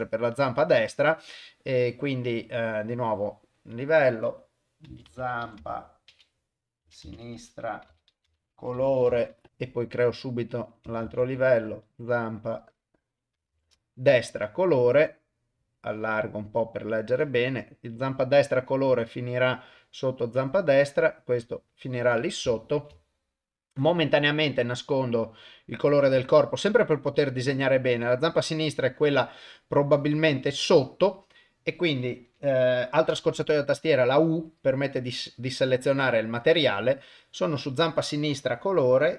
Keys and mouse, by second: 1.8 click, 3.0 click, 3.7-9.5 drag, 10.0 click, 10.7-13.7 ctrl+drag, 15.8 click, 18.7 click, 18.9 click, 19.1 click, 20.2 click, 21.6 click, 22.6 ctrl+middle click, 23.0 shift+middle click, 25.4 click, 28.4 ctrl+middle click, 38.8 click.